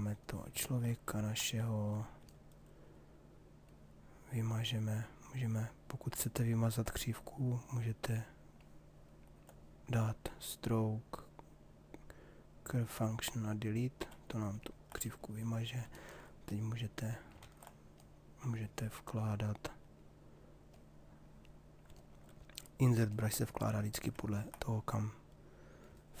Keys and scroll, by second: 16.9 ctrl+z.